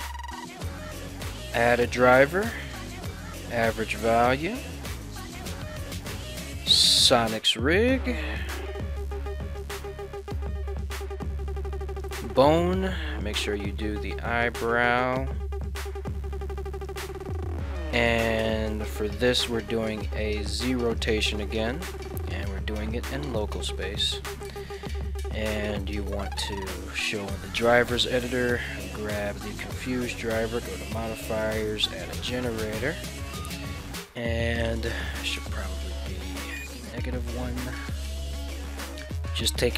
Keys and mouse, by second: 0.6-39.4 right drag, 9.0 Left, 9.1 Left, 10.4 Down.